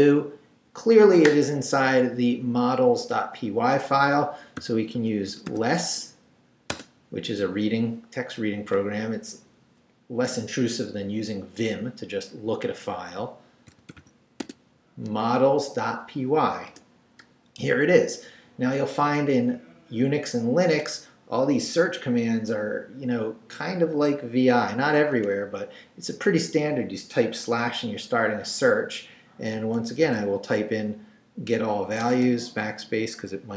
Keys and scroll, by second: 4.6 l, 4.9 e, 6.7 space, 13.5-14.5 typing, 16.7 Return, 25.1 /, 30.0 super+v, 32.0 BackSpace.